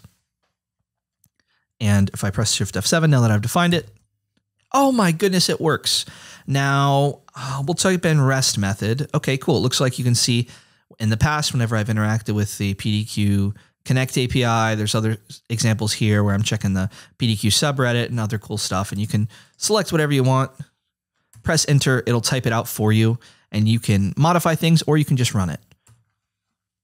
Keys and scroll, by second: 3.7 shift+F7, 7.2-8.9 typing, 21.4 Return, 25.4 super+a, 25.8 BackSpace.